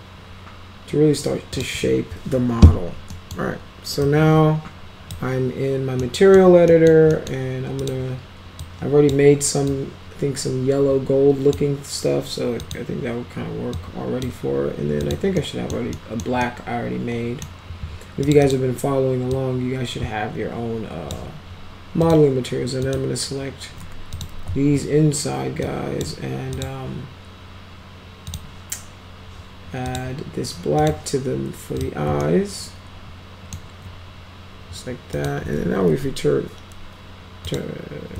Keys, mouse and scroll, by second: 1.6 click, 3.1 middle click, 4.1-5.1 drag, 6.0-6.4 middle drag, 6.7 middle drag, 7.2 middle click, 7.8 click, 8.7-9.1 drag, 9.7-11.6 drag, 12.6 click, 13.8-14.2 drag, 15.0 click, 15.4 middle click, 16.0 middle click, 16.5-17.5 middle drag, 18.3 click, 18.5 click, 19.4-21.2 drag, 22.0 click, 22.8 click, 24.2 ctrl+click, 25.7-26.0 drag, 26.6 click, 28.3 click, 29.9 click, 30.8 click, 31.8 click, 32.2-33.6 alt+middle drag, 35.2 click, 35.9 t, 37.5 click.